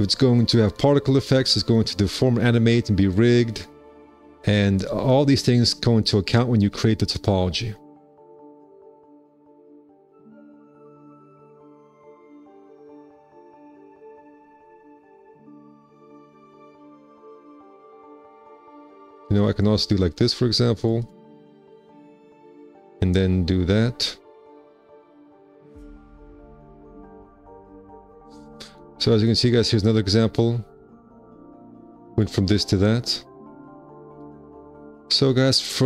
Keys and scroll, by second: 10.0 1, 14.4 alt+c, 19.5 alt+c, 21.4 2, 22.4 ctrl+1, 23.3 alt+c, 35.0 1.